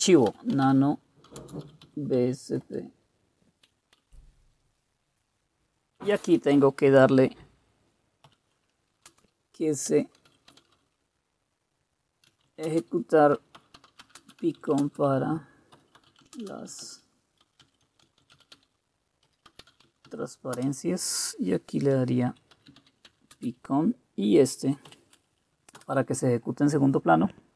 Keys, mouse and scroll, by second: 0.0-2.6 typing, 4.0-6.7 typing, 8.0-20.6 typing, 22.0-23.6 typing, 24.9-26.3 typing.